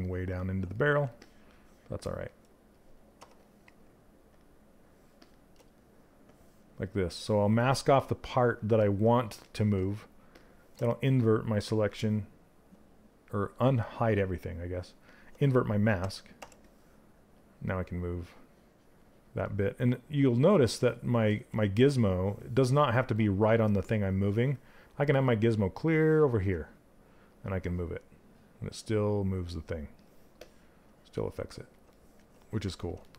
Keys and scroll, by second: 2.7 q, 15.9 w, 20.8 ctrl+z.